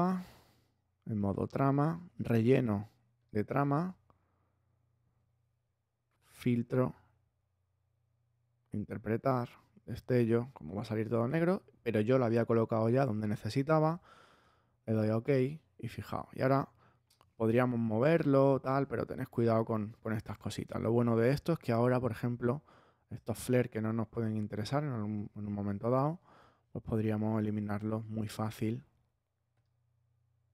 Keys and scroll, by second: 20.6 super+space, 26.4 b.